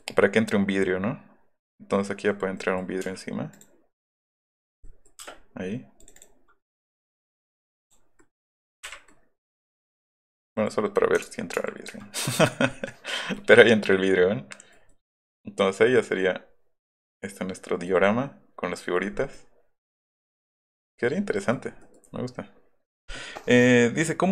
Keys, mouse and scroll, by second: 0.0 middle click, 0.8-2.3 middle drag, 2.6 click, 3.5 click, 4.5 click, 5.1 middle click, 5.2 space, 6.0 click, 6.2 click, 7.0 right click, 7.8 click, 8.2-8.7 scroll up 2, 9.1-9.5 scroll up 1, 11.2 ctrl+z, 12.3 middle click, 12.3-12.8 scroll, 12.7 middle click, 13.4-14.7 middle drag, 14.9-17.9 middle drag, 18.1 middle click, 19.5-21.1 middle drag, 21.3 middle click, 21.8 middle click.